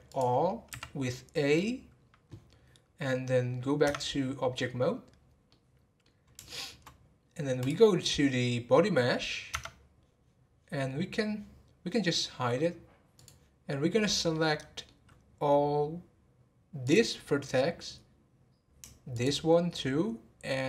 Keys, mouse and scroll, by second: 0.1 click, 0.7 a, 5.4-7.6 middle drag, 7.6 click, 13.2 click, 14.3-16.8 middle drag, 16.8 click, 19.1 shift+click.